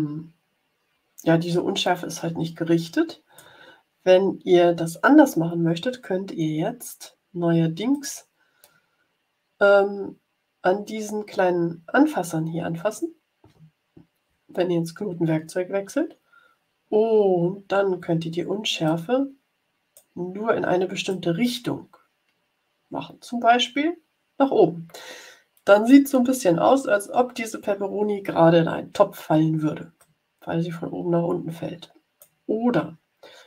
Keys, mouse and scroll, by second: 7.9 click, 18.8-20.2 drag, 21.0-26.0 drag, 29.9-32.4 drag.